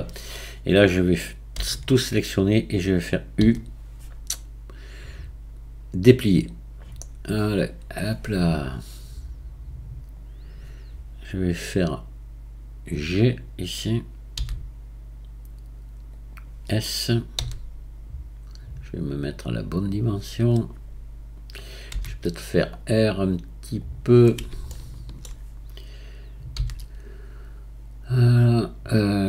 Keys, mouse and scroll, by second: 1.6 a, 4.2 u, 8.5 drag, 14.4 g, 17.4 s, 20.0-21.9 scroll up 1, 21.9 r, 24.7-26.6 shift+middle drag, 26.6 g.